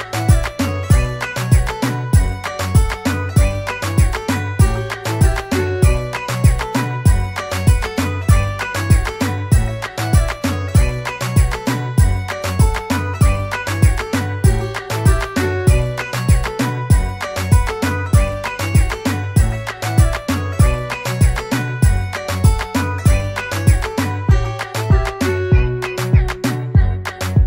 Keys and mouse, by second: 0.3 Return, 3.5 click, 6.7 click, 8.3 click, 11.7 click, 15.1 click, 18.0 click, 20.8 click, 24.6 click.